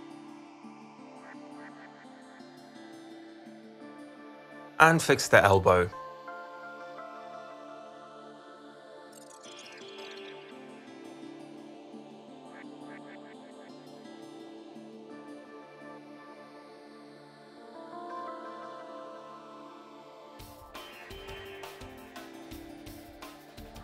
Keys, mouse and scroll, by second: 0.2 click, 1.0 click, 1.8 z, 2.2 click, 2.9 click, 3.1 click, 5.7 z, 6.2-8.8 drag, 8.9 alt+click, 9.4 alt+click, 13.6 click, 13.9 click, 14.5 click, 14.6 click, 15.2 click, 16.3 click, 17.1 click, 17.8 alt+click, 18.1 middle click, 18.7 ctrl+c, 19.6 ctrl+alt+v, 19.6 click, 22.0 click, 23.0 click.